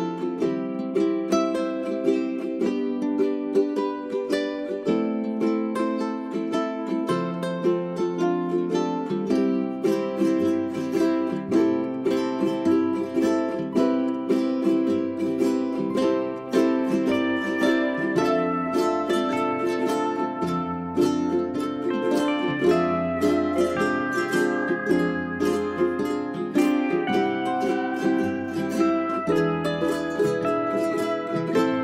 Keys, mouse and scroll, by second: 1.6-2.2 scroll down 1, 2.2-2.6 scroll up 1, 2.6-7.4 drag, 7.4 space, 7.6 click, 7.8 scroll down 1, 8.3 click, 9.1 middle click, 9.9 scroll up 1, 9.9 scroll down 1, 10.1 scroll up 1, 10.3 click, 13.1 g, 16.9 space, 17.1 click, 17.8 middle click, 20.0 click, 21.2 right click, 22.4 scroll up 1, 22.6-24.1 drag, 24.1 right click, 24.4 scroll up 1, 24.8 shift+click, 25.8 Delete, 26.3 click, 26.4-26.7 scroll down 1, 26.7-30.4 drag.